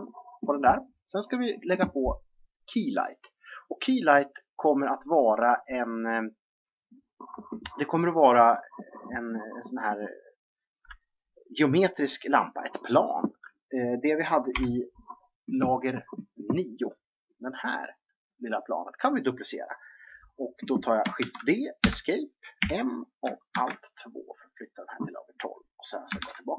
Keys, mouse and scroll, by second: 14.4 9, 17.1 click, 21.1 shift+d, 22.6 m, 26.1 alt+2.